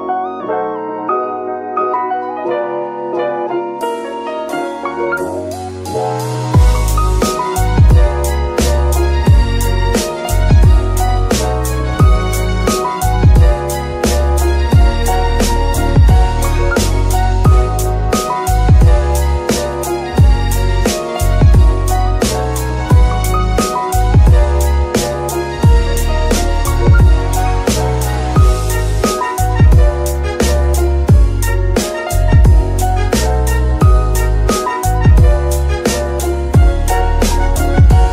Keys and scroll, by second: 0.4 g, 2.3 shift+Tab, 5.8 Tab, 12.9 g, 14.1 z, 15.7 r, 18.9 s, 24.8 g, 29.8 Tab, 32.5 Tab.